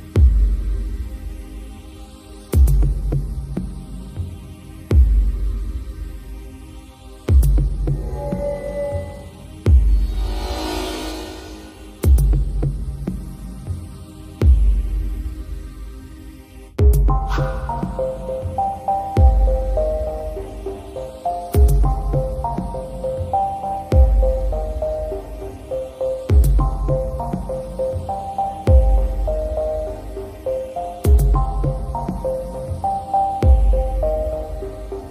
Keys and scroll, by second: 9.9 i, 14.4 super+[, 20.4 super+], 22.4 super+[, 24.4 super+], 28.0 super+[.